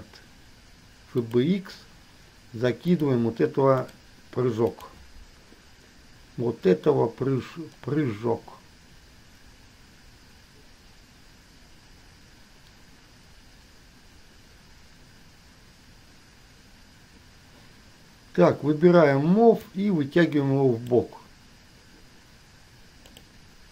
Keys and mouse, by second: 19.9-21.1 drag, 23.2 click.